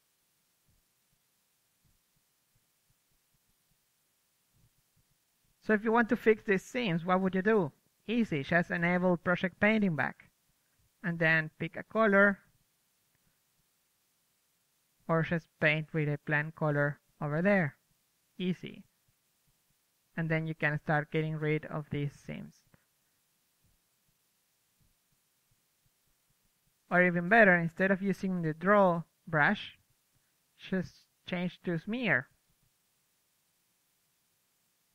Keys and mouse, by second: 3.9 KP_3, 5.0 KP_1, 6.3-8.2 drag, 6.9 ctrl+z, 7.1 ctrl+z, 8.3 ctrl+z, 9.7-11.0 drag, 11.0 shift+f, 11.8-12.8 drag, 13.1 ctrl+z, 13.7-14.9 right drag, 14.9 click, 15.0 right click, 15.1 click, 15.8 n, 16.2 shift+space, 17.3 KP_3, 17.6 ctrl+z, 17.7 ctrl+z, 17.8 KP_1, 18.1 ctrl+z, 18.1 ctrl+z, 18.3 ctrl+z, 18.3 ctrl+z, 18.9-19.9 drag, 19.3 ctrl+z, 19.5 KP_3, 20.6-21.8 drag, 21.8-27.3 drag, 27.6 middle drag, 28.3-33.0 drag, 33.9 f, 34.3-34.9 drag.